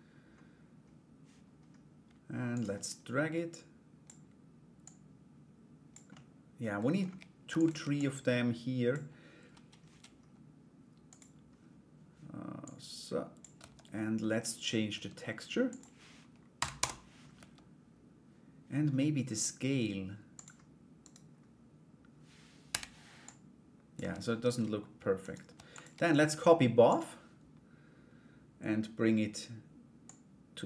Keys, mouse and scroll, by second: 2.1 click, 3.1 click, 4.4-5.5 drag, 5.7 middle click, 7.1 shift+d, 7.6 click, 10.7 click, 12.2 click, 13.2 Tab, 15.2 click, 18.8 Tab, 19.9 click, 20.6 right click, 22.8 click, 23.6 Tab, 24.8 shift+right click, 25.1 shift+d, 26.5 click, 29.7-30.6 drag.